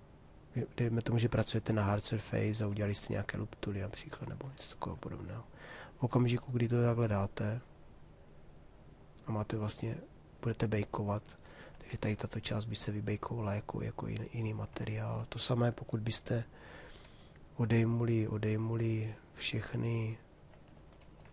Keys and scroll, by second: 16.6 3, 21.0 ctrl+3.